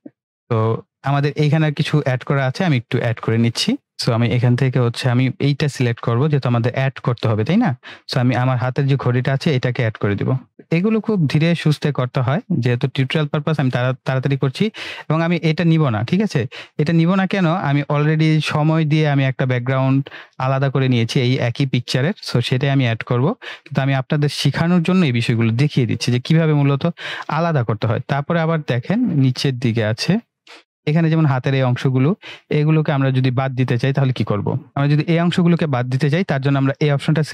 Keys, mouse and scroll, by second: 2.7 ctrl+=, 3.7 space, 5.0-11.1 drag, 16.4 ctrl+z, 17.1-17.7 drag, 23.0 ctrl+-, 28.2 ctrl+-, 28.4 ctrl+=, 29.4-30.7 typing, 29.5 click, 34.7-36.5 drag, 36.8-37.3 drag.